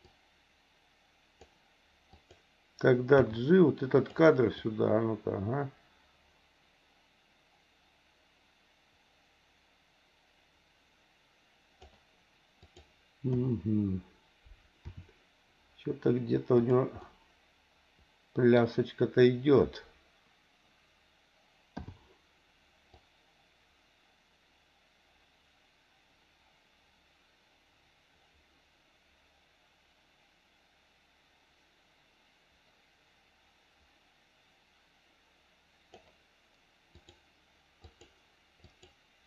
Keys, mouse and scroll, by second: 0.1-1.5 drag, 2.1 click, 3.2 g, 4.6-11.9 drag, 12.6 click, 13.3 KP_7, 14.8 r, 17.0-18.6 middle drag, 21.8 i, 23.0-36.0 drag, 36.9 click, 37.8 click, 38.6 click.